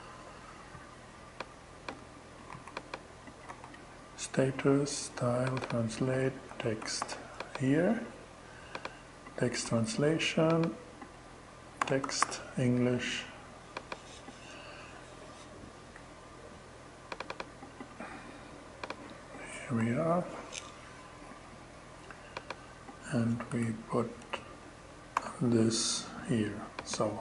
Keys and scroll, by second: 2.0 super+c, 2.9 super+v, 5.7-7.0 typing, 9.1 BackSpace, 11.0-12.2 typing, 19.2 Return, 22.9 Return, 23.6 BackSpace, 24.6 alt+6.